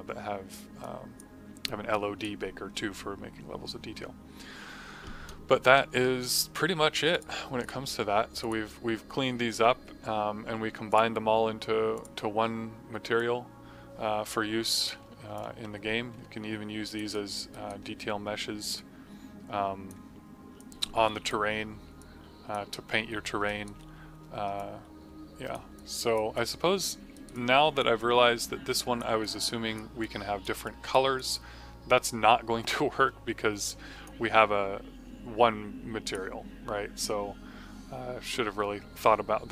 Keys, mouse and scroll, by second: 7.0 click, 10.8 click, 15.3 click, 17.0 right click, 17.4 alt+right click, 18.7 click, 23.4 alt+right click, 23.9 f, 24.5 alt+click, 25.7 alt+click, 26.3 click, 27.0 right click, 27.2 click, 27.9 click, 29.1 click, 29.9 click, 30.6 click, 31.1 click, 33.6 click, 36.0 click.